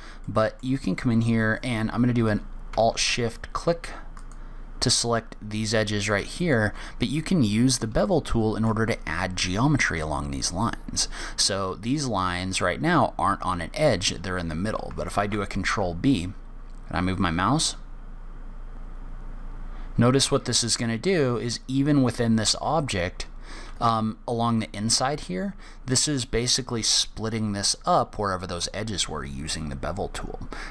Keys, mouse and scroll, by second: 0.6 middle click, 4.5 alt+shift+click, 6.4 alt+shift+click, 7.7-8.3 scroll up 1, 8.4 shift+middle click, 15.5 ctrl+b.